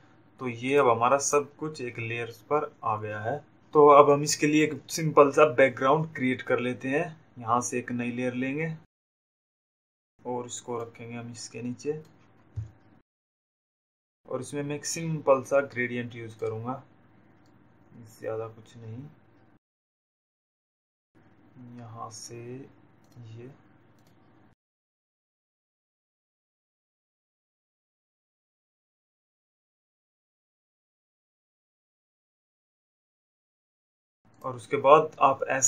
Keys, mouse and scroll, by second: 0.6 click, 9.3 click, 11.5 click, 15.5 click, 20.3 z, 21.4 click, 23.1 click, 24.1 click, 25.2 click, 30.1 click, 34.2 click.